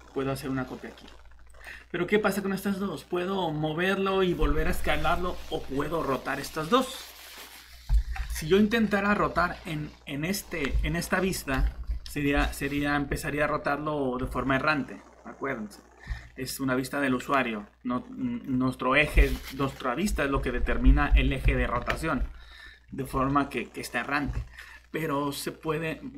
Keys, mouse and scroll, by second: 1.5 click, 8.7-9.1 typing, 8.9 middle click, 14.2 shift+r, 16.0 Escape, 22.9 r, 24.2 Escape.